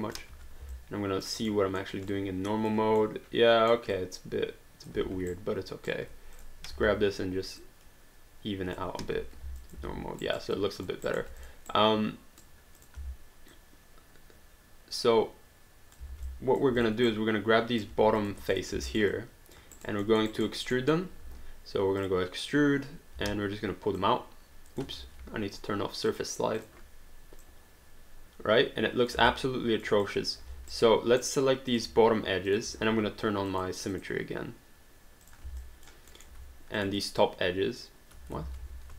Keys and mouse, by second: 0.3 1, 0.7 alt+click, 1.6 alt+middle click, 2.1 alt+click, 3.0 alt+middle click, 3.9 alt+click, 5.3 right click, 6.4 click, 9.0 3, 9.6 alt+click, 10.2 alt+right click, 10.6 alt+click, 11.1 alt+right click, 11.4 click, 11.7 right click, 12.8 click, 13.0 w, 13.5 click, 16.1 alt+d, 16.3 alt+click, 16.8 click, 17.0 right click, 17.9 q, 18.2 click, 18.5 shift+click, 18.9 alt+right click, 19.2 alt+click, 19.7 alt+right click, 20.0 alt+middle click, 20.3 alt+right click, 20.7 alt+middle click, 22.0 click, 23.2 w, 24.0 click, 24.9 ctrl+z, 26.1 click, 29.3 alt+click, 30.5 q, 30.7 right click, 31.7 click, 32.5 shift+click, 33.5 click, 35.2 click, 35.6 alt+click, 36.1 alt+middle click, 36.8 shift+click, 38.4 ctrl+z.